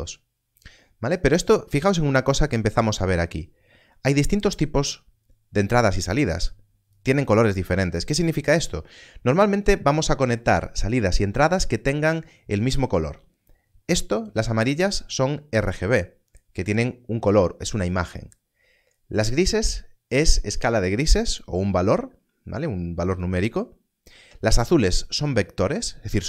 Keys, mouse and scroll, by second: 6.4 click, 14.2 click.